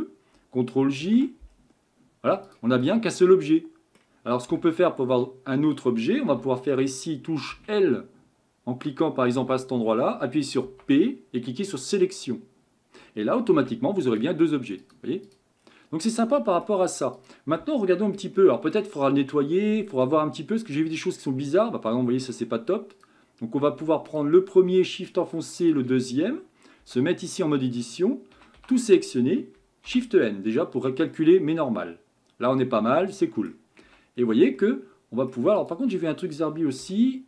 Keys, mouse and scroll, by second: 1.0 ctrl+j, 1.5-2.5 scroll down 1, 2.5 drag, 2.8 click, 3.3-4.5 middle drag, 4.5 Tab, 5.2 middle click, 5.9-6.3 scroll up 1, 6.3 a, 7.5 l, 9.3 l, 10.6 p, 13.5 Tab, 14.0 click, 14.8 click, 15.3 click, 15.6 scroll down 3, 16.0-17.1 middle drag, 17.1 click, 17.8-19.0 middle drag, 19.0 scroll up 5, 19.5-22.6 middle drag, 22.9 click, 24.1 click, 25.6 shift+click, 26.8 Tab, 28.3 a, 28.6 a, 29.9 shift+n, 31.1-33.8 middle drag, 33.8 Tab, 34.2-34.6 scroll down 2, 34.6-35.6 middle drag, 35.6 click, 36.8 g.